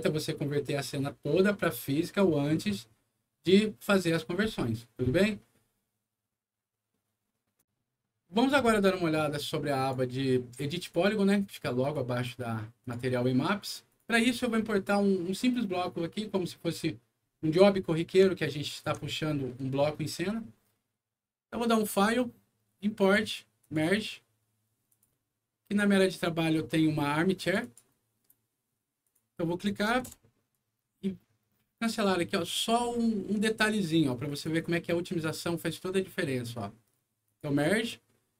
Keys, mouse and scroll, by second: 7.5 click, 9.7 click, 10.7 click, 11.7 click, 12.7 click, 13.8 click, 18.3 alt+middle click, 19.1 alt+middle click, 21.7 alt+click, 23.5 click, 24.8 click, 26.5 scroll down 2, 27.3 click, 27.5 click, 28.9 click, 30.0 Return, 31.8 click, 32.3 click, 34.2 click, 37.2 click.